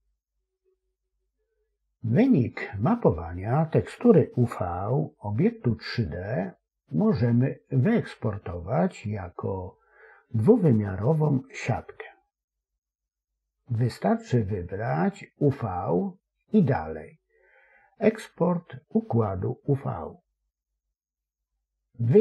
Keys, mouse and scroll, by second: 2.2-22.0 drag.